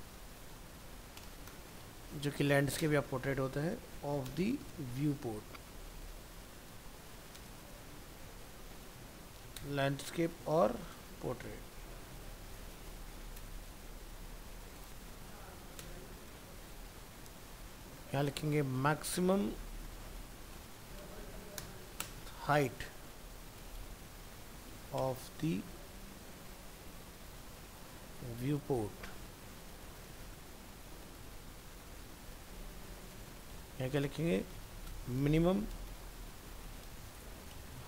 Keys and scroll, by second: 13.9 ctrl+Left, 28.4 ctrl+Left, 29.3 ctrl+Right, 31.0 ctrl+c, 32.9 ctrl+v, 34.9 ctrl+shift+Right.